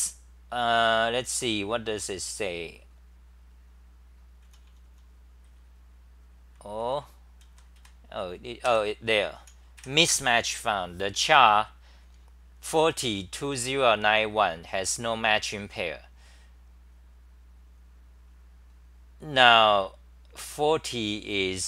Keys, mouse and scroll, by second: 4.4-10.3 typing, 21.5 typing.